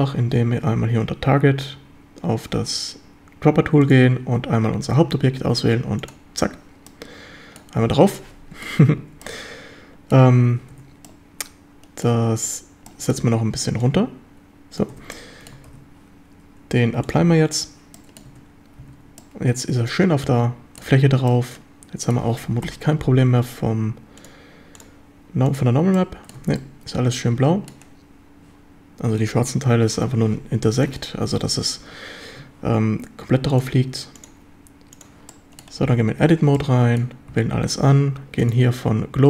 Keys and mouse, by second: 3.8 click, 6.9-7.6 middle drag, 8.1-8.6 middle drag, 9.2-10.1 middle drag, 10.7 Tab, 11.1-11.9 middle drag, 11.9 click, 12.1 Tab, 12.9 middle drag, 13.8-14.8 drag, 15.1 Tab, 15.1-15.5 middle drag, 15.7 ctrl+s, 17.1-17.6 drag, 17.9 middle drag, 18.3 Tab, 18.8 a, 19.2-20.8 middle drag, 21.3-22.2 middle drag, 22.6 KP_7, 24.2-25.7 drag, 25.9-26.3 middle drag, 26.4 Tab, 26.6-27.7 middle drag, 31.0 click, 33.7-35.2 drag, 35.3-35.6 middle drag, 35.8 Tab, 36.5 middle click, 37.3 a, 38.6-39.2 drag.